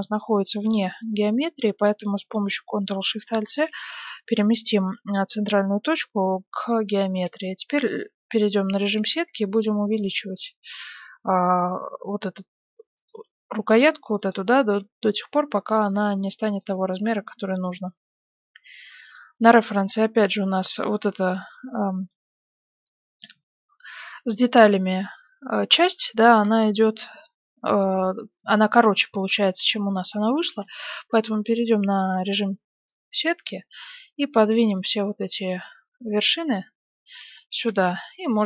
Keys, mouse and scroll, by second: 3.4 ctrl+alt+shift+c, 6.8-8.7 drag, 7.1 s, 8.0 z, 9.0 s, 10.0 g, 11.5 s, 13.1 g, 14.6 s, 15.4 g, 17.2 g, 19.4-24.7 middle drag, 26.3 KP_1, 30.6 Tab, 32.2 a, 32.6 b, 34.3-36.2 drag, 37.5 a, 37.6 b.